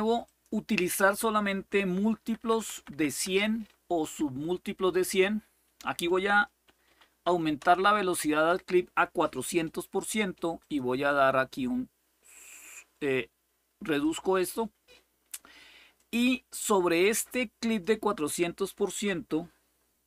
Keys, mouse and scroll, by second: 0.0 click, 2.0 Left, 2.2 Left, 2.4 Left, 2.5 Left, 2.8 Left, 3.0 Left, 5.4 Delete, 6.6 4, 7.4 Return, 10.3 click, 10.8-13.8 drag, 15.7 click, 16.1 click, 17.4 click.